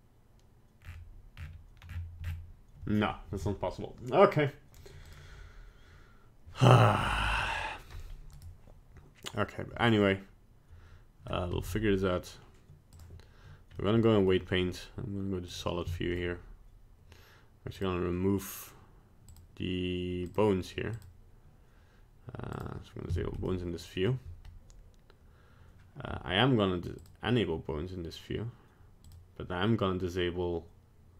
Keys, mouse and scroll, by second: 7.2 middle click, 7.4 middle click, 8.3 right click, 11.5 ctrl+Tab, 13.8 middle click, 15.5 click, 15.9 shift+middle click, 17.7 click, 19.3 click, 20.3 click, 20.9 click, 23.1 shift+middle click, 23.5 middle click, 27.0 click, 29.0 click.